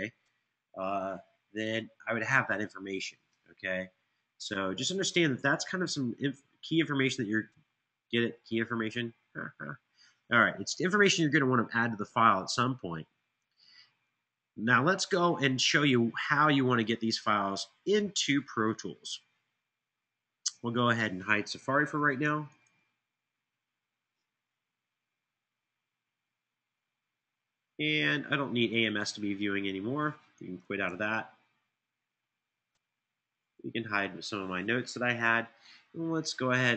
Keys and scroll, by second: 30.6 super+q.